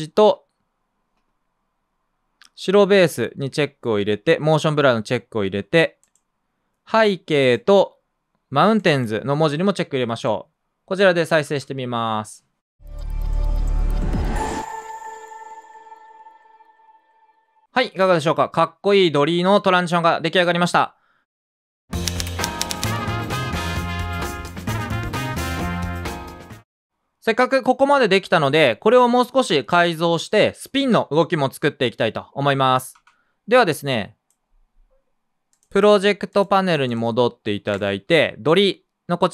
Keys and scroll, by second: 11.4 space, 17.7 space, 26.8 space, 33.5 space.